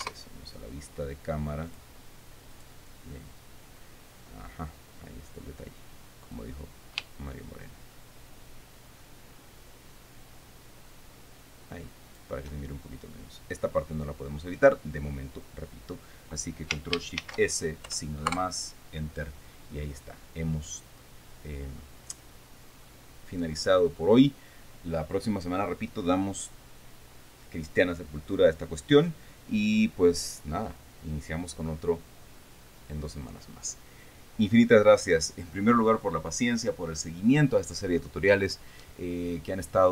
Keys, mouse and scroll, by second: 0.5 KP_0, 2.3 click, 3.1 click, 6.9-12.9 drag, 17.7 ctrl+shift+s, 18.4 KP_Add, 18.8 KP_Enter, 20.5-20.8 scroll down 2, 21.1-21.5 scroll up 2, 21.8 scroll down 2.